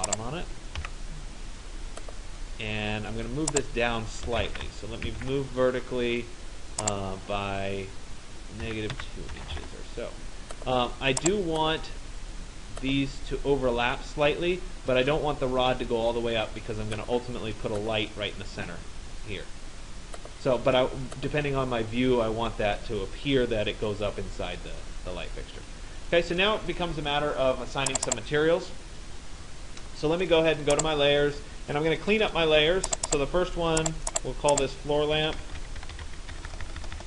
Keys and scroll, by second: 4.7 Return, 8.7 -, 9.0 2, 9.6 Return, 35.9 BackSpace.